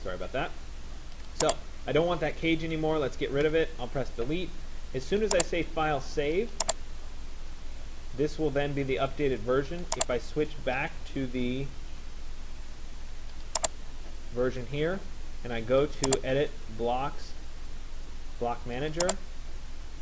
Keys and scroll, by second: 3.2 Delete.